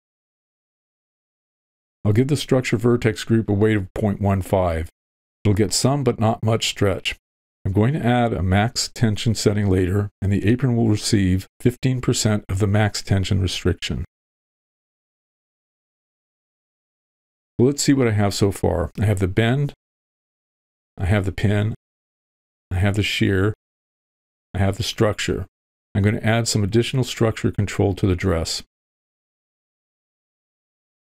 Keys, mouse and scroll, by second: 0.1-2.5 middle drag, 2.7 click, 2.8 middle click, 5.3-7.5 drag, 7.9 middle click, 10.7-12.7 middle drag, 13.3-14.3 middle drag, 14.8-16.2 middle drag, 16.3 middle click, 17.0 middle click, 19.1 alt+h, 19.1 click, 21.2 click, 23.3 click, 24.8 click, 28.0 v, 29.4 w, 29.9 click.